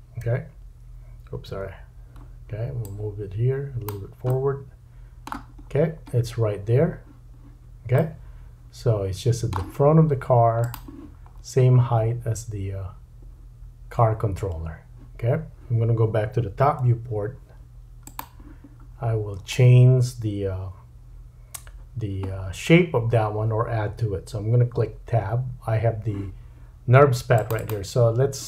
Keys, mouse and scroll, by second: 0.2 KP_1, 1.5 KP_3, 2.8 click, 4.3 middle click, 5.6-6.9 scroll down 5, 6.9-10.8 drag, 8.0 middle click, 10.8-18.2 middle drag, 11.3-13.7 scroll up 5, 16.8 `, 18.9-19.9 scroll down 7, 19.0 `, 22.3-25.6 scroll down 2, 27.3 click, 27.6-28.4 drag.